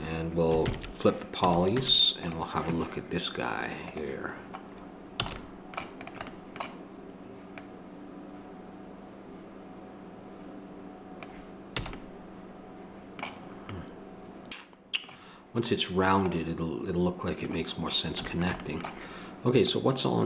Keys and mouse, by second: 0.6 ctrl+n, 1.4 a, 1.7 Tab, 5.2 a, 11.8 a.